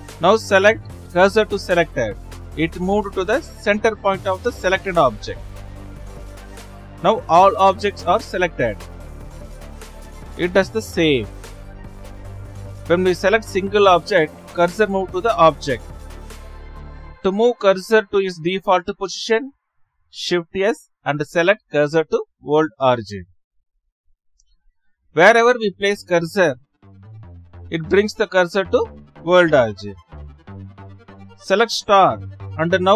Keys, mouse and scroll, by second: 1.1-3.5 right drag, 3.6 shift+s, 6.1 click, 8.8 a, 12.6 shift+s, 13.6 click, 14.6 click, 15.9 shift+s, 17.9 click, 20.0 shift+s, 21.0-22.4 middle drag, 22.4 shift+s, 25.0-25.9 drag, 26.3 click, 27.5-28.4 drag, 30.4 shift+s, 31.0-31.4 drag.